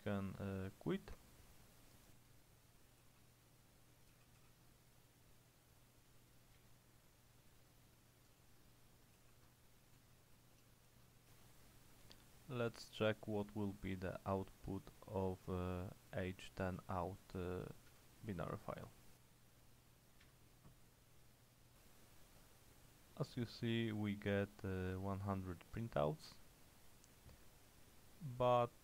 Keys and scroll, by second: 3.1-5.0 typing, 6.6 Return, 9.3-12.5 typing, 11.4 Return, 15.7-18.0 typing, 18.0 Tab, 20.1-20.8 typing.